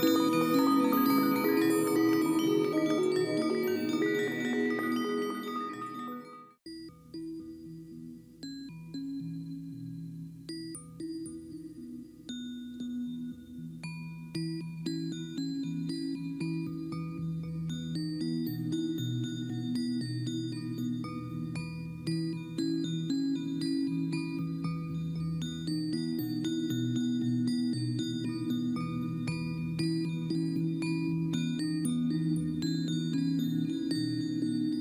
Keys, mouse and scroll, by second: 0.2 ctrl+j, 0.5 ctrl+t, 11.0 ctrl+t, 21.5 right click, 26.6 click.